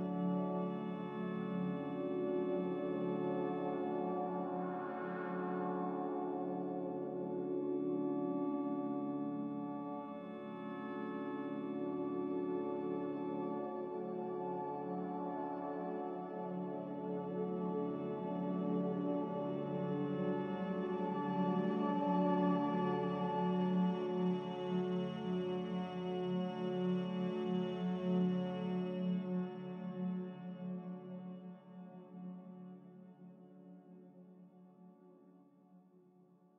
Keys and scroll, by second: 20.0 x, 30.8 z.